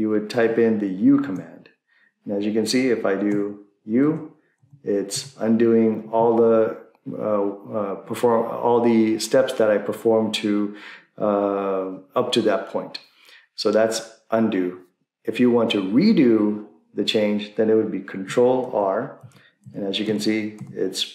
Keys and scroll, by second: 1.4 u, 3.2 u, 4.0 u, 18.6 ctrl+r, 19.2 ctrl+r.